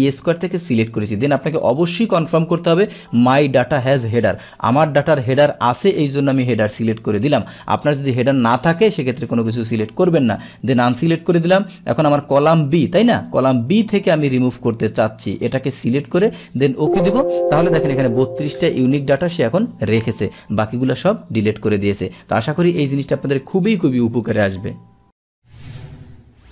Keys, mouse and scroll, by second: 4.1 click, 4.8 click, 10.9 click, 14.3 click, 15.4 click, 16.4 click, 19.1 click, 22.4 click.